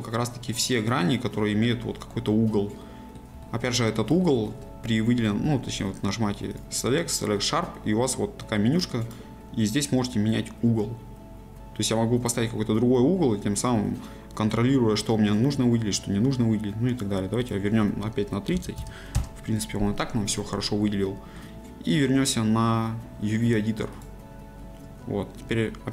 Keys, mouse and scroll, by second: 5.2-5.5 scroll up 1, 5.5-10.4 shift+middle drag, 10.4-13.3 drag, 19.1 click, 19.2 KP_Enter, 20.6-25.9 middle drag.